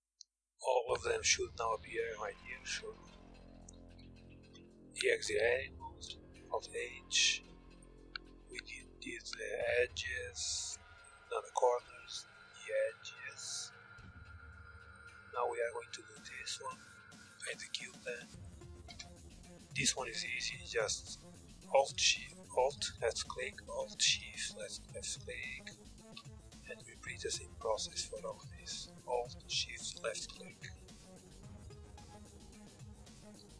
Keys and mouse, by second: 0.0 a, 0.2 a, 0.8 u, 2.6 KP_1, 3.9 Tab, 6.1 alt+h, 6.8 middle click, 7.4-9.2 drag, 11.0 h, 11.3-16.1 drag, 13.8 h, 16.9 h, 18.4 Tab, 26.0-28.2 drag, 27.9 ctrl+z, 29.0-33.5 drag, 31.9 ctrl+z, 33.0 u.